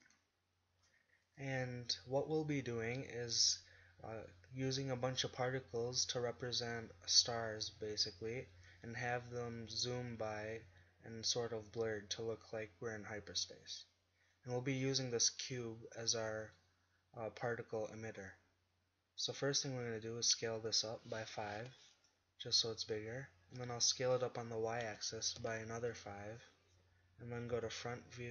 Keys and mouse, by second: 1.3-3.2 drag, 13.4-17.8 middle drag, 20.6 s, 24.1 s, 27.6 KP_1.